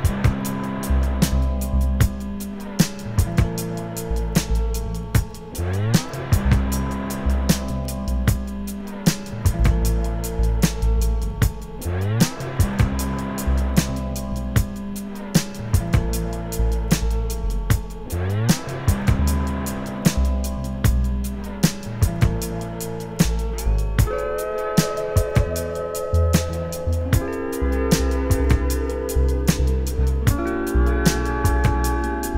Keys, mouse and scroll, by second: 0.3 Tab, 0.4 `, 1.1 scroll down 2, 1.3 KP_7, 1.8 scroll up 1, 2.0 `, 2.8 `, 4.3 ctrl+r, 5.8 g, 6.5 right click, 6.7 g, 6.9 right click, 7.1 ctrl+z, 7.8 ctrl+r, 8.8 `, 9.6 ctrl+z, 10.3 click, 10.6 `, 13.2 click, 13.8 alt+a, 14.4 ctrl+r, 14.7 click, 15.5 `, 16.1 scroll up 1, 16.8 ctrl+z, 17.1 click, 17.9 shift+click, 18.5 j, 20.3 click, 24.5 ctrl+shift+b, 25.7 click, 25.9 shift+click, 27.0 alt+a, 27.3 click, 27.7 shift+click, 28.5 click, 28.6 shift+click, 29.1 alt+m, 29.7 ctrl+r, 30.9 click.